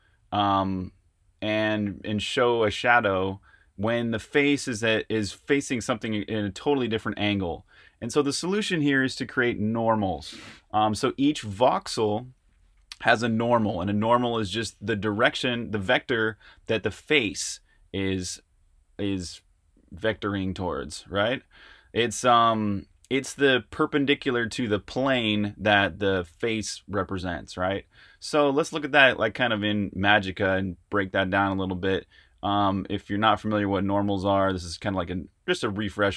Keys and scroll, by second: 28.5-30.3 typing.